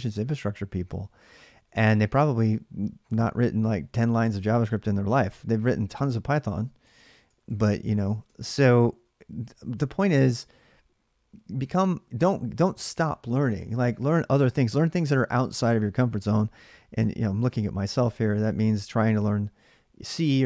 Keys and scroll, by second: 0.8 j, 1.0-2.6 j, 2.6 k, 2.9 k, 6.6-8.8 typing.